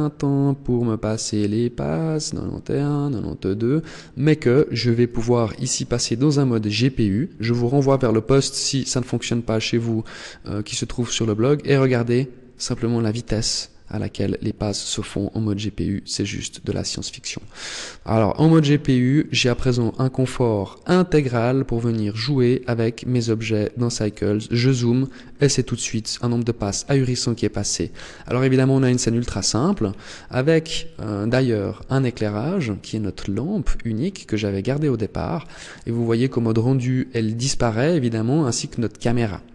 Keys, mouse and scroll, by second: 4.8 click, 17.2 middle click, 18.8 middle click, 23.0 scroll up 2, 29.1-29.4 scroll down 6, 29.8 middle click, 31.4-31.9 scroll down 3, 32.4-33.7 scroll down 3, 34.8 scroll up 4, 39.2 middle click.